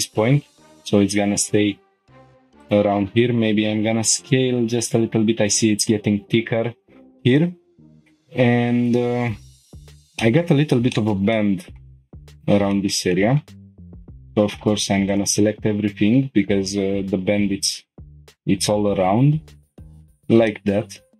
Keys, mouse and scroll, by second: 2.6 click, 3.4 s, 3.7 y, 5.7 click, 6.1 g, 6.4 y, 7.3 click, 7.9 shift+middle click, 10.2 middle click, 10.9 shift+middle click, 11.3 middle click, 12.3 click, 12.7 shift+middle click, 13.1 middle click, 13.8 ctrl+click, 15.1 click, 16.8 g, 17.2 y, 19.8 shift+click, 19.8-20.2 scroll down 3, 20.5 shift+middle click.